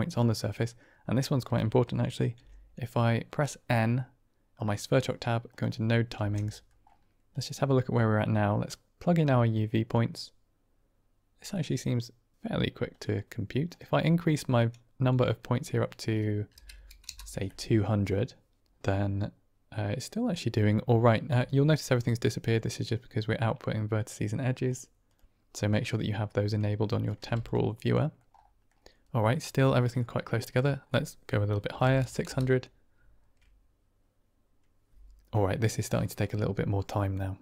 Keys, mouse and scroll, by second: 2.3 n, 4.4 click, 5.4 click, 6.0 n, 6.5 middle click, 7.2 middle click, 8.2-9.9 drag, 11.5 middle click, 13.8-18.6 drag, 16.7 KP_0, 24.6 click, 25.0 click, 26.8 drag, 27.1 g, 27.9 middle click, 29.1 middle click, 30.0 click, 30.4-37.4 drag, 31.9 KP_0.